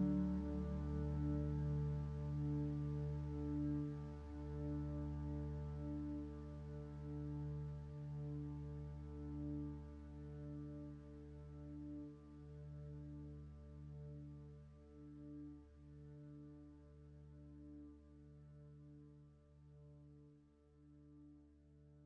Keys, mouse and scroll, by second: 3.5 ctrl+space, 9.1 ctrl+space, 14.5 ctrl+z.